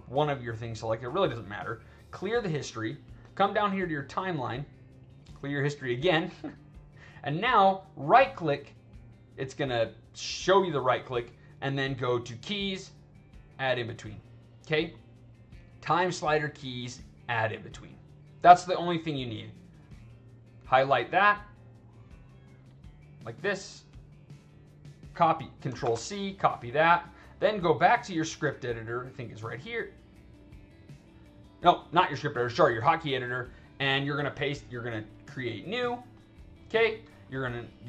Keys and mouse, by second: 0.9 click, 2.1 click, 4.1 click, 6.5 click, 8.3 right click, 19.7-21.5 drag, 22.4 click, 23.1-24.6 drag, 25.7 ctrl+c, 26.6 click, 28.9 click, 37.1 click.